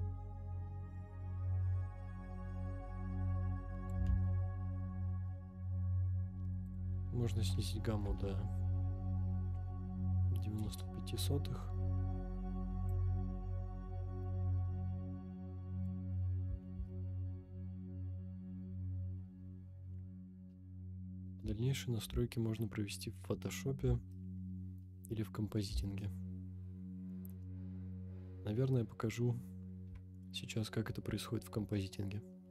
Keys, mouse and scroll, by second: 5.3 ctrl+z, 6.6-10.8 drag, 12.9-15.9 drag, 17.9 ctrl+z, 19.2-20.0 scroll up 3, 20.0-20.6 scroll down 4, 20.9 shift+middle click, 21.6 scroll up 4, 22.5-23.2 shift+middle drag, 23.5 scroll up 2, 24.1-24.8 shift+middle drag, 25.2 scroll down 3, 26.0-27.3 shift+middle drag, 27.6-28.4 scroll down 1.